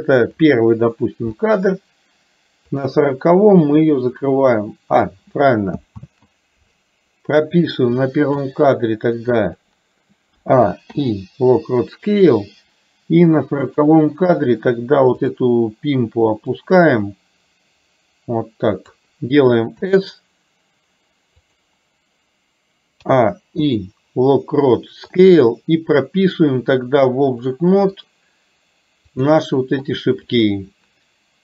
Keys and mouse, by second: 2.8 click, 4.3 click, 6.0 ctrl+z, 7.9 click, 8.4 click, 13.6 click, 16.6-19.0 drag, 23.0 a, 27.5 click, 29.1 click, 30.4 click.